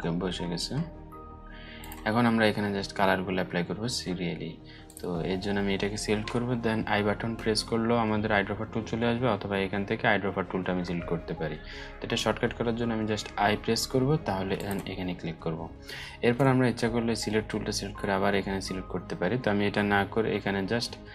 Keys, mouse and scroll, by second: 1.3 click, 2.0 alt+scroll up 1, 4.4 click, 12.7 i, 14.1 click.